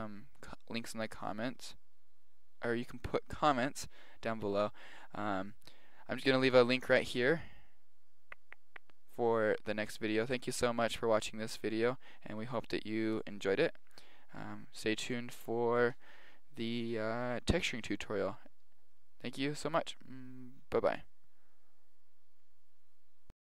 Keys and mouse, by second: 12.5-14.3 middle drag.